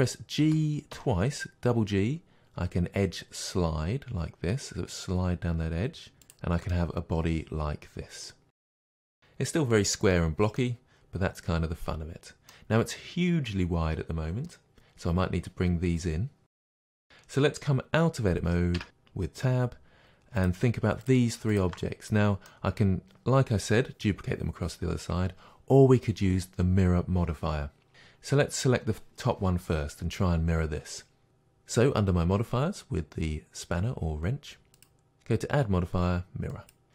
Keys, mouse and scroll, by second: 0.4 g, 6.3 click, 6.7-20.4 middle drag, 18.8 Tab, 20.4 click, 21.0-21.6 shift+drag, 22.1-28.5 middle drag, 28.5 click, 34.7-36.9 drag.